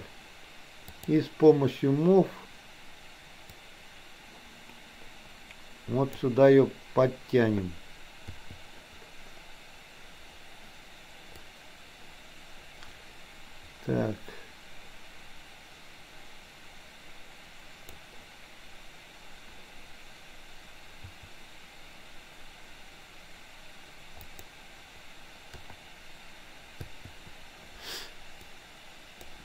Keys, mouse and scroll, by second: 0.9 click, 3.7-6.3 drag, 11.4-18.0 drag, 21.0 g, 25.7 KP_8, 26.8 i, 28.4-29.3 drag.